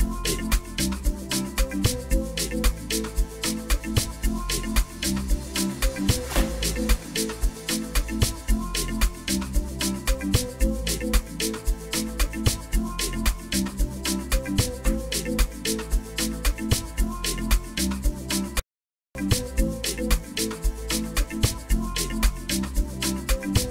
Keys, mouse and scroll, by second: 7.0-7.6 drag, 18.5 Escape.